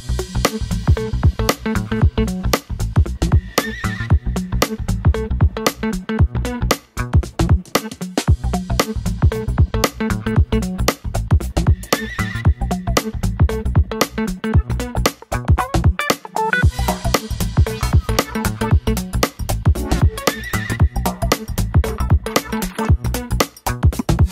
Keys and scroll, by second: 0.0 Left, 0.2 Left, 12.2 2, 12.4 Return, 14.2 Right, 14.4 Right, 14.5 Right, 14.7 Right, 15.0 Right, 21.8 Left, 21.9 Left, 22.5 Left, 22.7 Left.